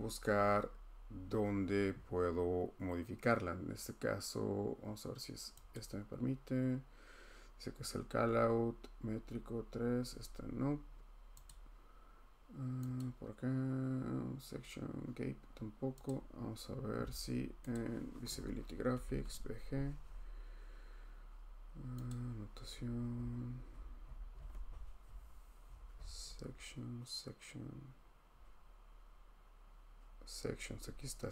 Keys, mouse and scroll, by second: 5.7 click, 11.5 click, 13.0 click, 16.1 click, 17.7 click, 18.8-19.7 typing, 20.8-21.6 typing, 22.1 click, 22.6-26.0 scroll, 28.3 scroll.